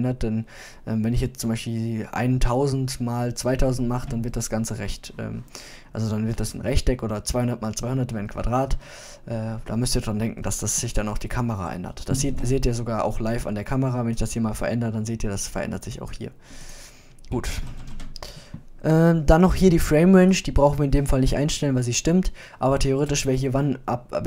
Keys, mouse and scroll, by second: 4.0-5.8 middle drag, 10.1-12.2 middle drag, 12.5 KP_0.